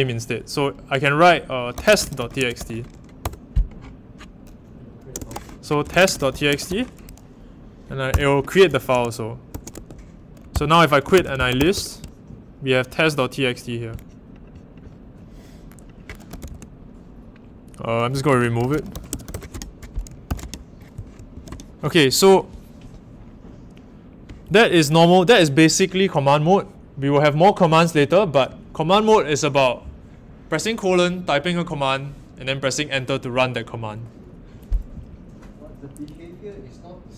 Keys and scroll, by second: 1.5-3.0 typing, 3.2 Return, 4.9-7.2 typing, 8.1 Return, 9.2-12.1 typing, 10.5 Return, 16.0-19.7 typing, 20.2 ctrl+k, 21.3 ctrl+l.